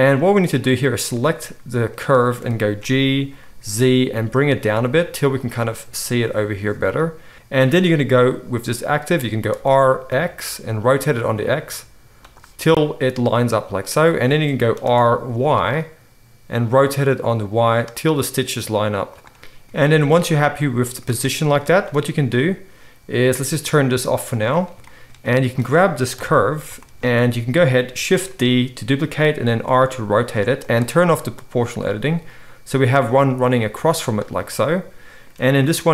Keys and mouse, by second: 0.2-5.5 middle drag, 2.8 g, 5.5-7.3 right drag, 7.3 r, 9.5 r, 14.8 r, 19.1 middle click, 21.1-24.3 shift+middle drag, 24.3 click, 24.7-29.9 shift+middle drag, 26.1 KP_7, 28.3 shift+d, 29.4 r, 31.3 click, 31.8 r.